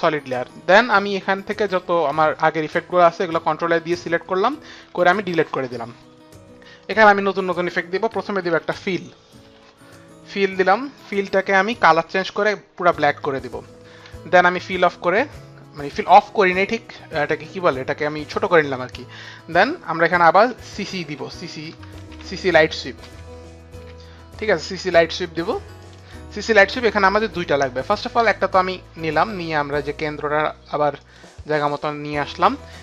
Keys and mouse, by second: 2.0 ctrl+a, 4.7 Delete, 6.7 Delete, 6.7 click, 7.9-9.2 typing, 10.4 click, 12.7 click, 13.0 Return, 15.7 Return, 15.7 click, 16.1 click, 20.4-23.8 typing, 29.1 click, 30.9 click.